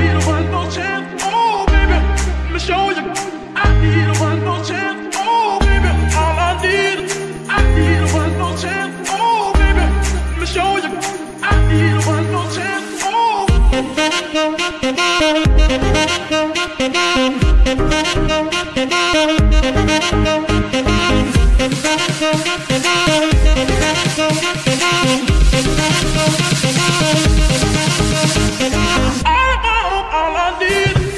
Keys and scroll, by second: 3.1 Escape, 4.1 r, 5.6 Escape, 7.4 g, 7.6 y, 11.6 Escape, 29.1 g, 29.2 y.